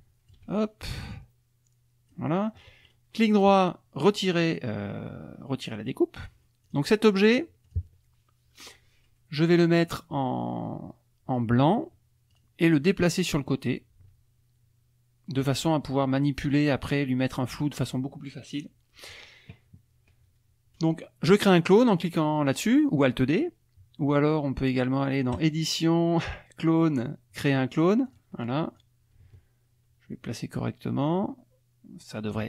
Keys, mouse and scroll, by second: 1.1-2.3 ctrl+shift+drag, 2.8 right click, 5.7 click, 6.2 click, 6.6 click, 7.3 click, 7.6 click, 9.4 middle click, 12.3 click, 13.1-15.6 drag, 25.4 click, 28.1 click, 28.8-32.4 drag.